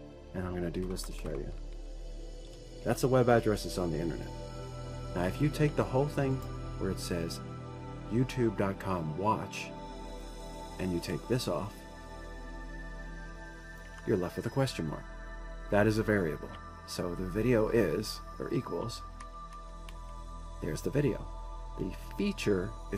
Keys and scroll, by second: 1.5 Return, 1.6 Return, 1.8 Return, 1.9 Return, 2.2 Up, 3.1 ctrl+v, 14.5 Delete, 19.9 Delete, 20.2 Delete, 20.6 Delete.